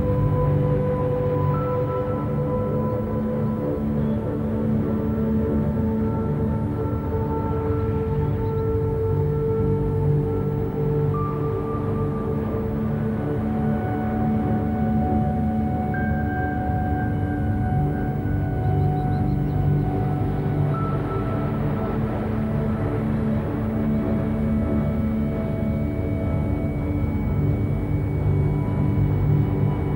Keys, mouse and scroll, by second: 0.2 scroll up 1, 0.4-2.4 shift+middle drag, 2.4 KP_7, 2.9 a, 3.1 a, 3.4-3.8 scroll down 2, 3.8 shift+a, 7.1 ctrl+3, 7.5 right click, 8.6 KP_1, 9.0 KP_3, 10.0 KP_7, 10.6 scroll down 3, 11.1 g, 14.2 click, 14.7-15.0 scroll up 1, 15.0 Tab, 15.3 middle click, 15.7 a, 15.9 a, 16.3 KP_1, 17.3 ctrl+r, 18.5 shift+middle click, 18.9 scroll up 1, 19.6 ctrl+b, 22.1 alt+e, 26.2 a, 26.4 a, 26.7 3, 26.8 click, 27.3 click, 28.1 middle click, 28.7 shift+click, 29.1-29.4 scroll down 1, 29.4 middle click.